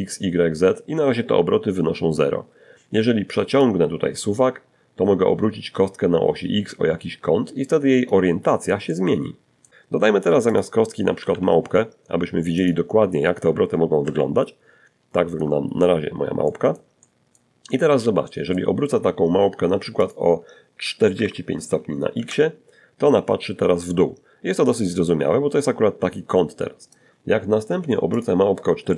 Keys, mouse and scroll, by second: 1.8-6.5 drag, 7.1 middle click, 8.2-8.7 scroll down 1, 8.8 middle click, 9.3-10.1 typing, 10.8 click, 12.2 ctrl+2, 12.7 ctrl+scroll up 1, 13.3 shift+middle click, 13.8-14.4 shift+scroll up 2, 14.6 middle click, 15.3 middle click, 15.9 middle click, 16.6 middle click, 18.2 click, 19.3 4, 20.4 Return, 22.5 scroll down 1, 22.9-25.3 middle drag, 26.3 click, 27.4-28.4 typing.